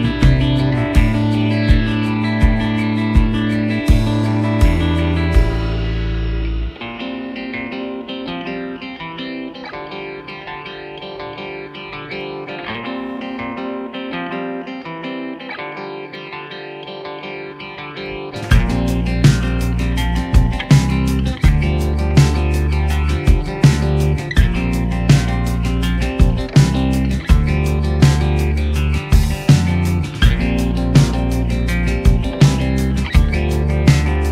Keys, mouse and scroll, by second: 3.0 ctrl+z, 6.9 ctrl+z, 6.9 double click, 8.8 v, 9.2-9.9 alt+scroll up 6, 10.0 ctrl+click, 12.2 ctrl+click, 12.5 alt+click, 14.2 alt+click, 15.9 alt+scroll down 1, 16.7-17.0 alt+scroll up 1, 17.7 alt+click, 19.3 alt+click, 21.4 shift+click, 24.6 Return, 25.9 alt+click, 29.2 alt+click, 31.0 alt+scroll, 31.1 alt+scroll down 1, 31.3-32.2 alt+scroll up 1, 33.7 ctrl+click, 34.2 alt+click.